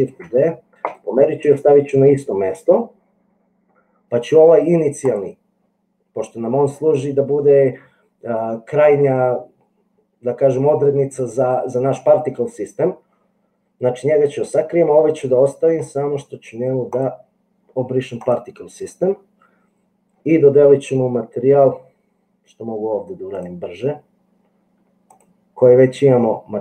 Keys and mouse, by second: 0.3 shift+d, 17.2 click, 23.3 click, 25.2-26.6 drag.